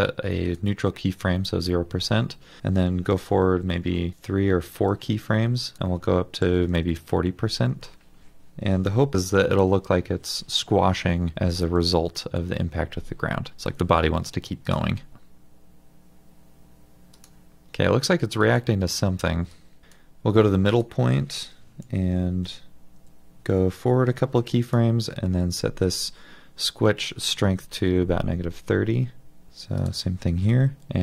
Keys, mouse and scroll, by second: 3.4 ctrl+Right, 3.8 ctrl+Right, 6.5 typing, 6.7 Return, 11.2-12.1 typing, 22.5 ctrl+Right, 23.0 ctrl+Right, 26.9 typing, 27.5 Return, 29.5 ctrl+Right.